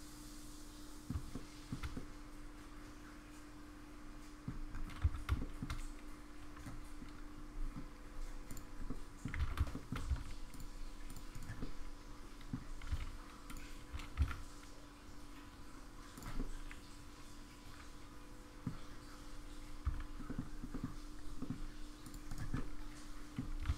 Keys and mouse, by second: 1.3-1.7 shift+middle drag, 1.9-4.4 middle drag, 5.0 Tab, 5.4 shift+middle click, 8.9 middle click, 9.5 alt+z, 9.7 middle click, 10.1 c, 11.6 middle click, 12.8 g, 13.9 g, 16.4-18.6 middle drag, 19.8 c, 22.5 middle click, 23.6 g.